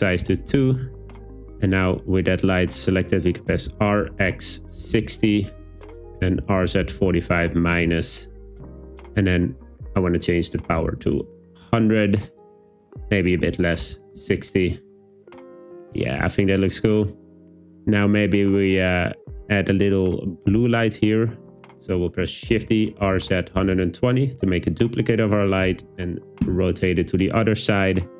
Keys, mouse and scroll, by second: 3.7 r, 4.1 x, 4.8 6, 5.0 0, 5.8 Return, 6.5-7.1 typing, 7.7 Return, 9.7-11.1 drag, 10.9 0, 13.2-14.2 drag, 22.5-23.8 typing, 26.5 Return.